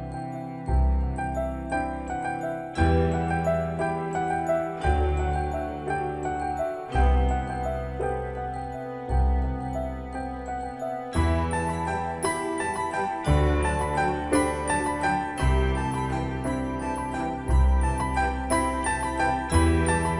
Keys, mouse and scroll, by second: 1.1 typing, 2.4 click, 11.7 scroll up 1, 12.3-13.2 scroll down 1, 15.4-17.1 typing, 18.6-20.1 drag.